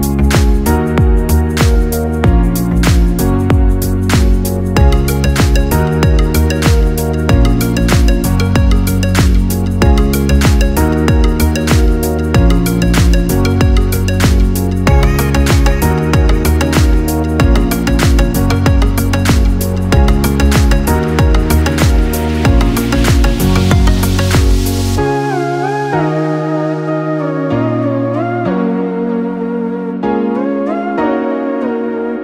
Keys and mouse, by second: 1.3-2.6 ctrl+middle drag, 2.6-3.1 ctrl+KP_4, 3.7-4.4 middle drag, 4.4 g, 5.9 g, 8.7-9.6 middle drag, 9.6 g, 11.6-12.3 middle drag, 12.3 g, 13.6 g, 16.0-17.3 middle drag, 17.5-20.6 ctrl+middle drag, 23.1 r, 26.0 r.